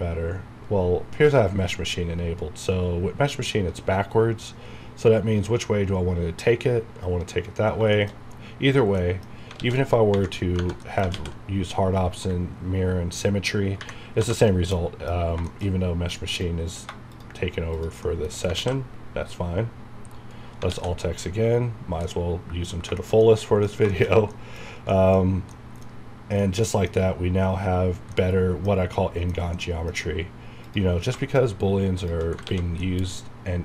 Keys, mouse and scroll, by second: 7.5 scroll down 1, 7.9 shift+middle click, 9.0 middle click, 9.6 alt+x, 10.4 scroll down 1, 10.8 middle click, 11.1 alt+x, 14.7 middle click, 15.1 scroll up 1, 15.5 shift+middle click, 15.6 shift+scroll up 2, 16.3 click, 17.1 shift+click, 18.0 shift+middle click, 18.5 ctrl+x, 19.0-20.6 scroll down 1, 22.0 middle click, 22.7 scroll down 1, 22.9 shift+scroll up 1, 23.0 shift+middle click, 24.1 shift+scroll up 2, 24.3 middle click, 24.8-25.2 scroll up 2, 24.9 middle click, 25.5 middle click, 26.1-26.5 scroll down 2, 26.4 middle click, 28.1-30.0 middle drag, 30.0 scroll up 1, 30.6 click, 32.0 shift+click, 32.4 ctrl+x, 32.8-33.6 middle drag.